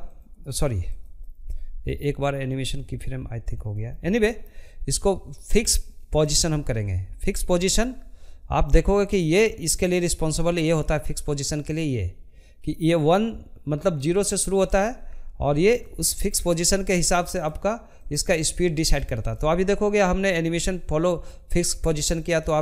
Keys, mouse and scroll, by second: 1.9-4.3 shift+middle drag, 4.3-5.3 drag, 5.3-7.0 shift+middle drag, 7.0-9.7 drag, 13.9-22.6 drag.